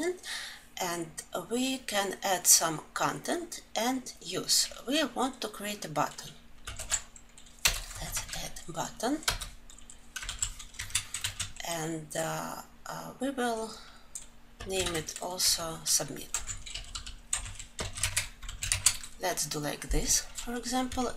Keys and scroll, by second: 8.9 Return, 9.9 ctrl+alt+l, 18.2 ctrl+alt+l, 21.0 alt+Left.